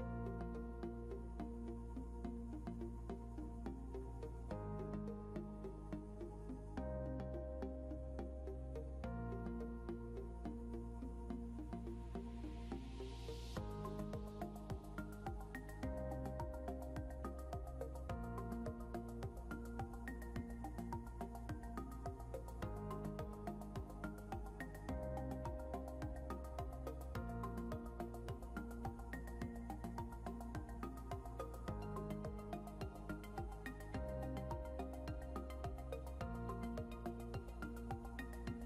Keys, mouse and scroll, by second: 0.6 click, 1.4 scroll up 1, 3.6 right click, 4.7 click, 5.2 scroll down 1, 6.8 click, 9.5 scroll up 1, 11.1 click, 15.0 click, 16.8 scroll up 1, 18.4 click, 27.8 click, 30.6 scroll down 1, 32.1 scroll up 1, 35.8 click, 36.1 scroll down 1.